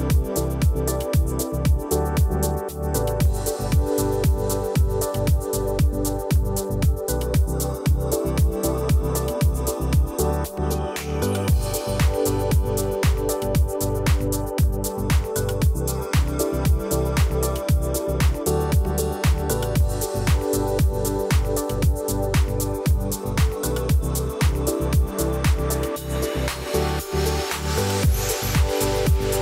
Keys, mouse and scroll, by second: 0.1 alt+scroll up 1, 0.9 click, 3.1 alt+scroll down 1, 4.0 alt+scroll up 1, 4.4-6.0 drag, 6.8-7.4 alt+scroll down 1, 7.4 alt+scroll up 1, 8.5-9.2 drag, 10.4 alt+scroll up 1, 11.0-13.4 drag, 20.1 alt+scroll down 1, 20.5 alt+scroll up 1, 21.7 alt+scroll down 1, 23.9-24.5 alt+scroll up 1, 26.3-27.4 drag.